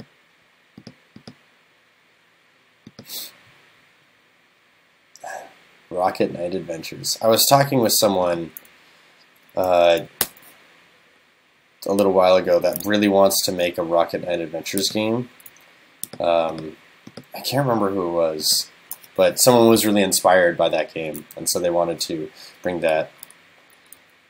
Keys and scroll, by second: 10.2 super+BackSpace.